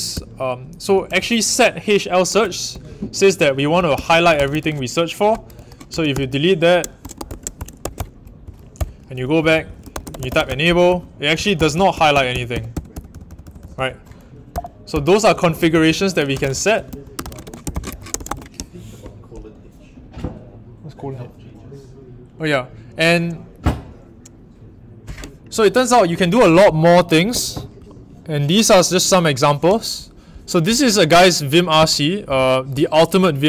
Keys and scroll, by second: 0.1-18.7 typing, 5.5 Escape.